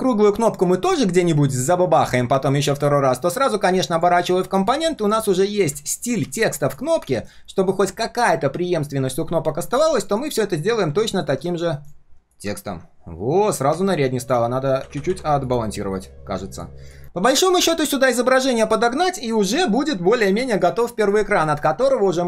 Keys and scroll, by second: 5.5 ctrl+alt+c, 7.2 ctrl+alt+v, 11.5 alt+v, 11.7 alt+h, 18.9 ctrl+shift+4, 19.3 ctrl+shift+3, 19.8 ctrl+shift+3.